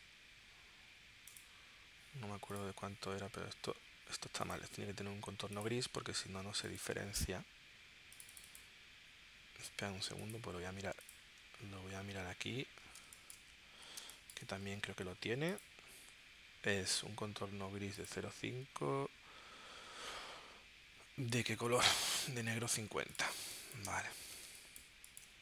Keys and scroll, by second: 13.0 space, 14.0 space, 23.4 space, 24.4 space.